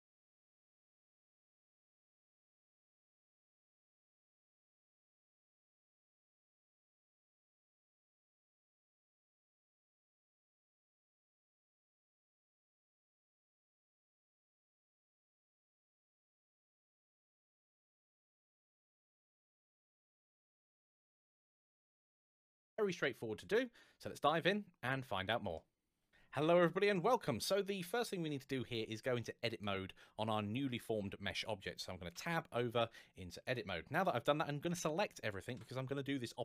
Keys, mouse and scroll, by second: 25.6 click, 29.3 click, 31.9 Tab.